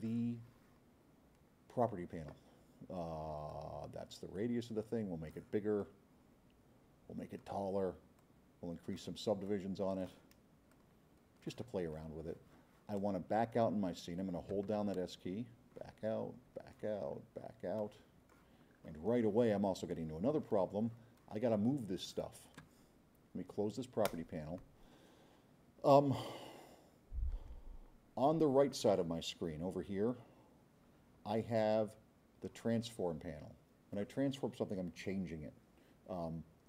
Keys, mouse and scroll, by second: 3.5-5.1 drag, 5.3 click, 5.8-7.4 drag, 8.2-9.0 drag, 9.5-10.1 drag, 10.7-11.5 drag, 15.1 middle click, 15.2 middle click, 16.0 middle click, 16.4 middle click, 17.1 middle click, 17.8 click, 18.7 middle click, 18.8 middle click, 19.1 middle click, 19.9-22.2 drag, 24.1 click.